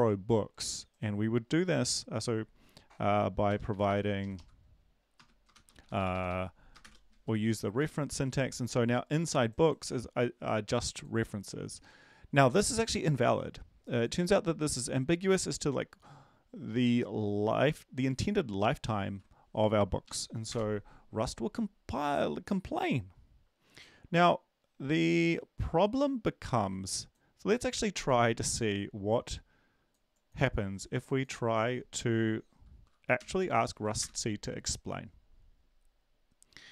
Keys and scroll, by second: 4.2 Right, 4.2 Left, 4.2 ^, 4.3 Left, 5.5 typing, 5.8 Right, 5.9 Right, 6.1 Right, 6.8 Right, 7.1 End, 7.8 ctrl+s, 19.1 ctrl+`, 20.0 Up, 33.2 ctrl+l, 33.6 ctrl+v, 34.0 Return, 34.2 ctrl+1.